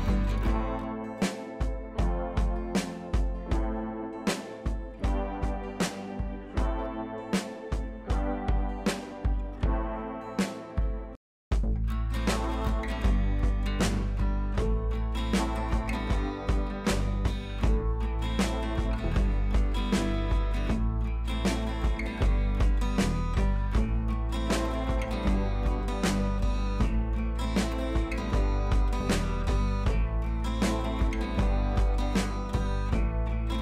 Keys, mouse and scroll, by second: 0.2-0.8 scroll up 2, 0.8 click, 1.8 ctrl+l, 2.8-4.5 drag, 7.4 scroll up 1, 8.6 scroll down 1, 10.2 click, 16.3-16.8 scroll up 1, 16.8 click, 17.2-17.6 scroll up 1, 17.6 click, 18.0 scroll up 1, 18.2 click, 18.6-19.1 scroll up 1, 19.1-19.4 scroll down 1, 22.0-23.4 drag, 23.8 scroll down 1, 24.8-26.0 drag, 26.3 ctrl+t, 26.9-28.6 drag, 29.8 click, 31.4 click, 32.9 click.